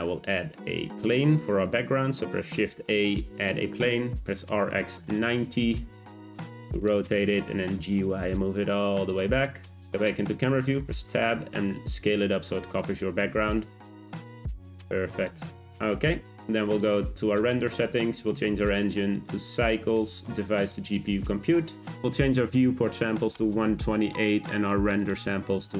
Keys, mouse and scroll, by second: 0.0-0.9 scroll down 3, 0.9 shift+a, 4.1 r, 6.2 middle click, 6.7-7.5 scroll down 4, 7.5 g, 9.4 `, 10.8 Tab, 11.1 a, 11.2 s, 14.3 click, 14.7 Tab, 15.1 click, 15.6-16.7 scroll up 1, 16.7 click, 18.1-21.9 drag, 24.9-25.7 drag.